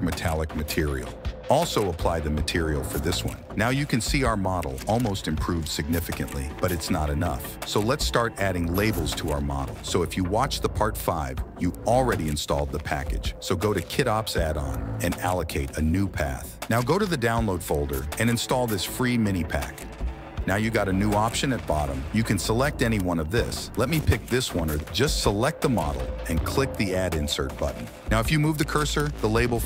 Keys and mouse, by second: 1.5 /, 1.9 click, 2.5-3.6 drag, 4.0 click, 8.2 click, 8.8 /, 9.7 n, 10.5 click, 11.3 right click, 12.5 right click, 21.4-22.1 drag, 22.3-24.4 drag, 25.8 click.